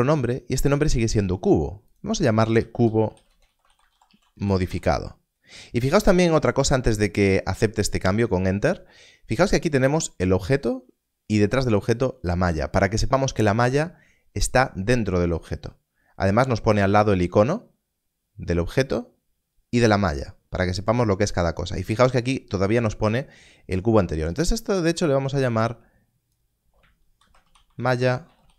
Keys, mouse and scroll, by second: 1.8 click, 2.5-4.5 typing, 6.5 o, 24.3 click, 27.1-28.5 typing.